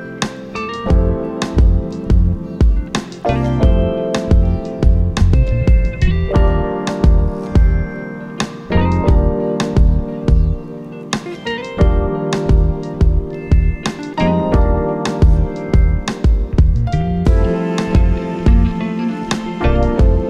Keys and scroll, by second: 5.5 n, 8.6 n, 13.8 2, 14.6 1, 16.0 /, 17.8 4, 19.2 1.